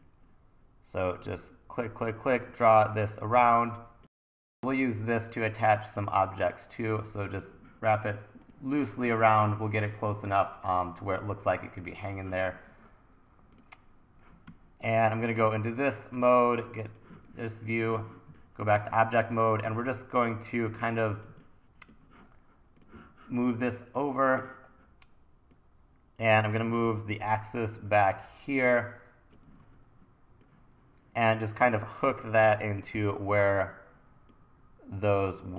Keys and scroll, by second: 1.3 super+z, 1.9 super+z, 14.5 1, 20.7 1, 23.0 e, 26.9 l, 29.6 super+z, 32.4 l, 33.0 r.